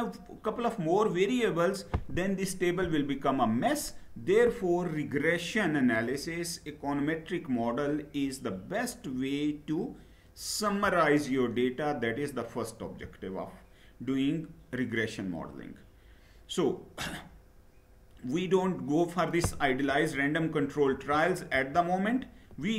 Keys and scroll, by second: 12.5 Down, 19.6 Down, 20.6 Down, 21.2 Down, 22.5 Up.